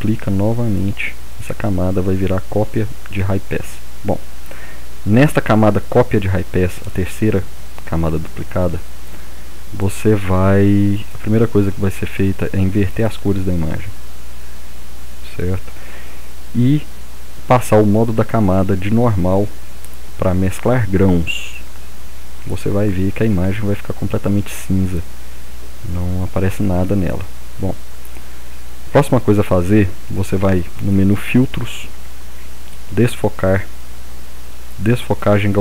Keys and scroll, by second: 0.0-0.1 typing.